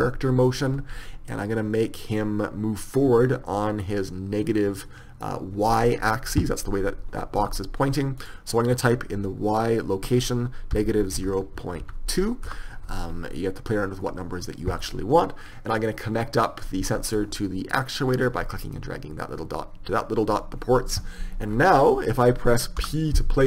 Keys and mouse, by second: 2.8-4.2 drag, 17.7-18.8 drag, 22.3-23.4 middle drag.